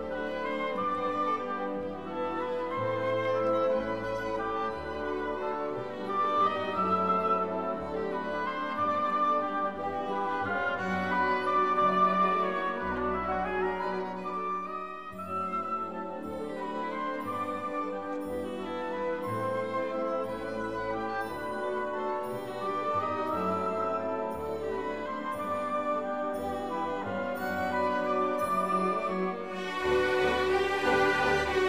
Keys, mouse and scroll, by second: 0.5 2, 1.3 0, 2.8 click, 3.5 2, 3.8 4, 4.4 0, 5.6 click, 8.2 click, 8.8-9.1 scroll up 1, 10.0 click, 11.7 click, 12.6 1, 13.0 0, 14.0-16.6 drag, 18.4 click, 19.1-20.5 typing, 20.6 scroll down 2, 21.7-22.8 drag, 23.4 click, 23.7 click, 25.0 click, 26.8 click, 29.0 click, 31.0 2, 31.4 0.